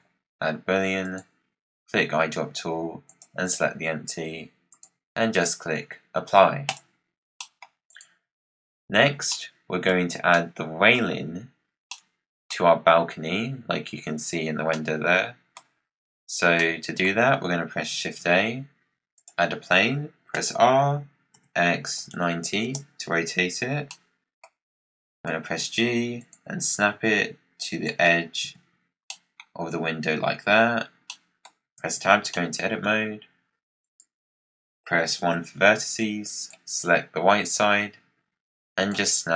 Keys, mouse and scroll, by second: 4.6-7.3 drag, 7.3-7.8 middle drag, 7.8 click, 8.6-9.2 scroll down 3, 9.2-9.8 middle drag, 9.8-10.2 scroll down 1, 10.2-11.4 middle drag, 11.4-11.9 scroll up 6, 11.9-14.4 middle drag, 14.4 scroll up 1, 14.6-15.7 middle drag, 15.7-16.5 scroll down 3, 16.5-17.9 middle drag, 17.9 shift+a, 20.2 r, 23.8 middle click, 24.6-25.2 scroll up 2, 25.2 g, 26.5 g, 28.3 KP_Decimal, 29.0-30.5 middle drag, 30.5-31.0 scroll down 2, 31.0 middle click, 31.7 Tab, 32.2-33.7 middle drag, 33.7 click, 35.1 1, 35.4 scroll down 2, 35.9 click, 37.5 click.